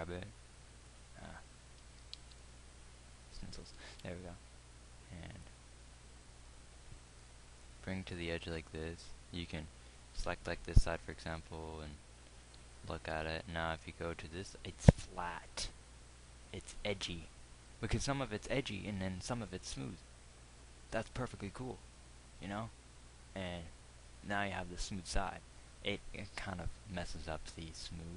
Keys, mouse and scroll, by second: 0.2 g, 2.6 ctrl+z, 4.4 ctrl+r, 10.6 z, 13.5 Tab.